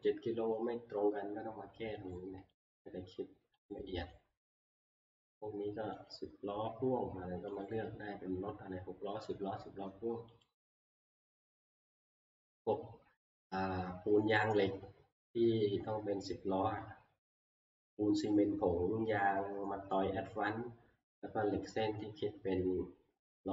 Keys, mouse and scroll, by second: 2.1 click, 2.7 click, 3.6 click, 4.1 click, 6.2 click, 7.7 click, 10.5 click, 11.3 click.